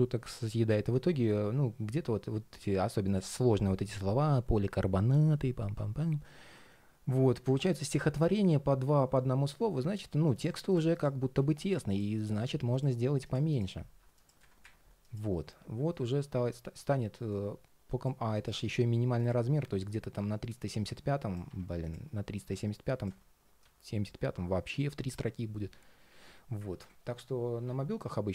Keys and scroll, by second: 21.2 super+z, 26.5 super+z.